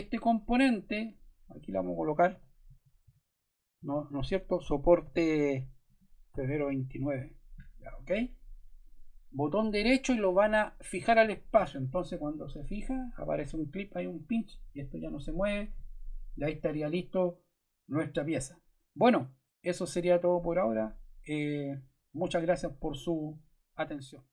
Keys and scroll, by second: 2.0-7.0 typing.